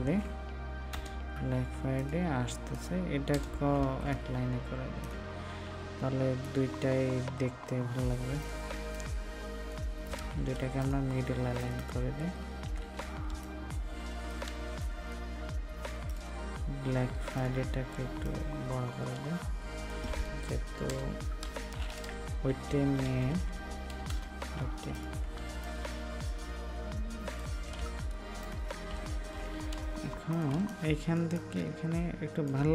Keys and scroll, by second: 10.1 ctrl+a, 14.4 ctrl+d, 27.7 ctrl+a, 30.4 ctrl+d, 30.4 ctrl+space.